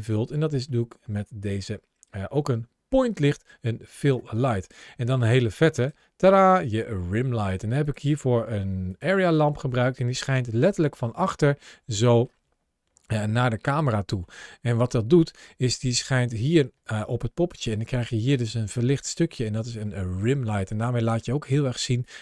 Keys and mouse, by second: 0.5-3.9 middle drag, 5.6 click, 8.7 click, 10.0 click, 10.5-12.1 middle drag, 14.2 middle click, 16.0 ctrl+shift+a.